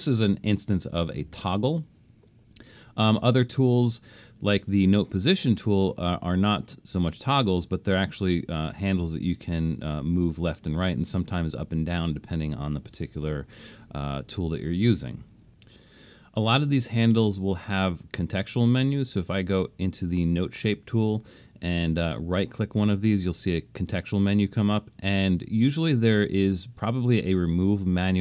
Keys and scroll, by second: 12.0 super+z.